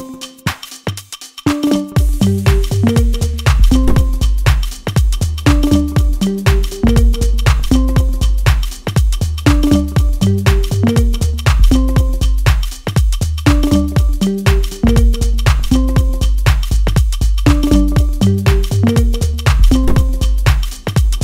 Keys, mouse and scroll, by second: 1.7-2.6 scroll up 1, 2.6 click, 3.3-3.6 shift+scroll up 1, 4.4-7.6 drag, 13.4 click, 15.9-17.7 middle drag, 17.7 click, 20.8 click.